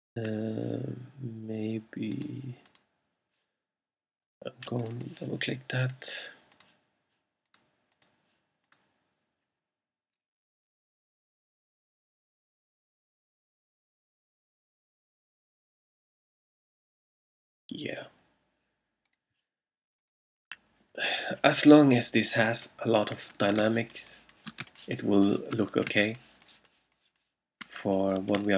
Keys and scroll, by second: 23.7 alt+space, 24.6 space, 25.9 alt+space.